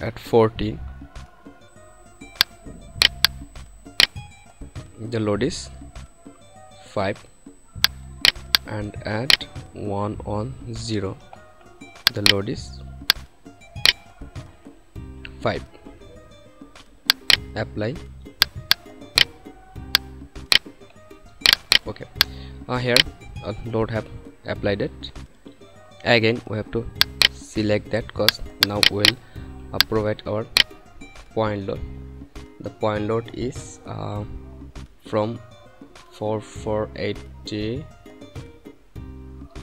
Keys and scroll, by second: 0.0 0, 6.9 5, 9.8 1, 10.8 0, 15.0 5.